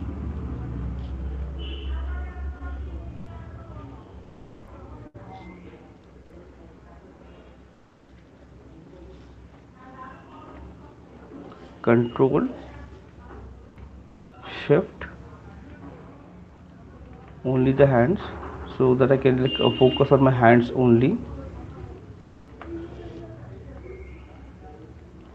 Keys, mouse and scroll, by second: 0.0 shift+click, 1.0 alt+click, 1.5 ], 1.7 ], 1.9 ], 2.1 ], 2.9 alt+click, 3.3 click, 3.8 click, 4.0 click, 4.4 click, 6.0 click, 6.2 click, 6.4 click, 8.1 shift+click, 9.5 click, 10.9 right click, 11.3 click, 16.8 click, 19.1 right click, 20.4 shift+click, 21.8 click, 23.1 right click, 23.4 alt+click, 25.0 click.